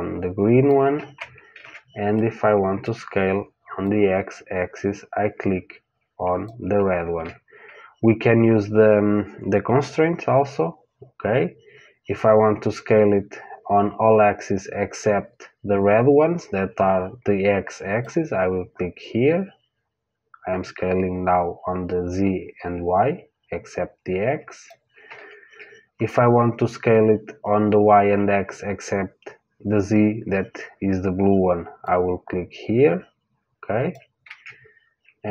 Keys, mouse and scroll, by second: 1.5 ctrl+z, 2.1-3.8 middle drag, 3.8 click, 6.9 ctrl+z, 17.9 click, 25.1 ctrl+z, 31.8 click, 34.2 ctrl+z.